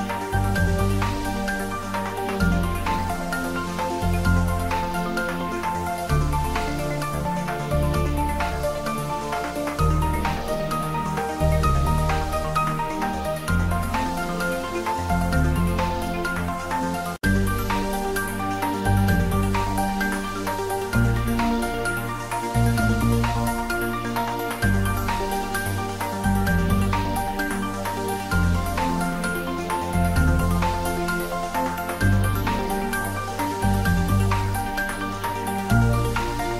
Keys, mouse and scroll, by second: 0.4 ctrl+s, 1.0 click, 2.8-7.4 drag, 7.4-9.6 drag, 10.4 click, 11.4 ctrl+s, 13.3 click, 15.3-18.7 drag, 18.7 ctrl+s, 25.8 ctrl+s, 27.8 click, 29.5 Return, 30.7 click, 31.0 ctrl+s, 32.3 shift+middle click, 34.0-35.1 middle drag, 35.1 click, 35.8 x, 36.0 click.